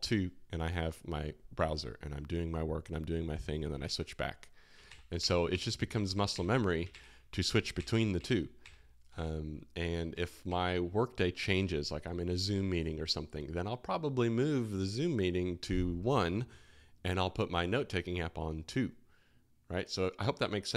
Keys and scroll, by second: 3.8 alt+1, 4.8 alt+2, 5.1 alt+1, 5.5 alt+2, 5.9 alt+1, 6.3 alt+2, 6.9 alt+1, 7.7 alt+2, 8.1 alt+1, 8.6 alt+2, 9.1 alt+1, 10.1 alt+2, 10.4 alt+1.